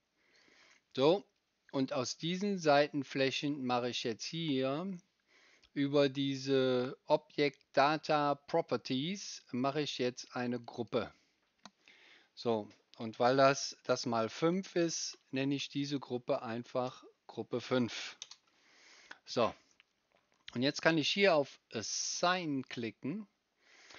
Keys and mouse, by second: 0.3 middle click, 0.4-10.5 right drag, 10.5 middle click, 10.6 right click, 10.9-23.9 middle drag.